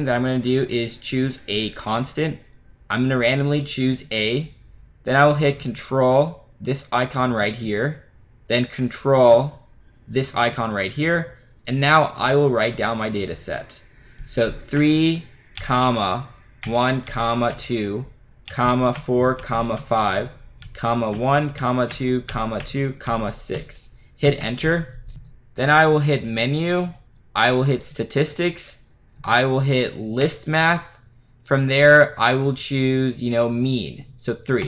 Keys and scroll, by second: 4.0 a, 10.5 ), 14.9-23.7 typing, 24.4 Return, 25.1 BackSpace, 26.4 Menu, 30.3 3.